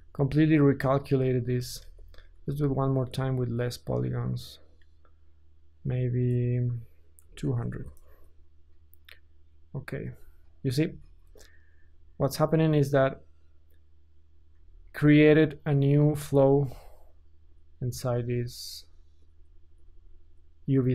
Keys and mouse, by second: 1.8 ctrl+z, 2.5 ctrl+z, 4.0-4.8 middle drag, 4.8-15.8 drag, 7.6 KP_0, 14.5 Tab, 15.8-18.8 middle drag, 18.8 alt+click, 19.0 middle click, 19.2 click, 19.7-20.9 alt+middle drag.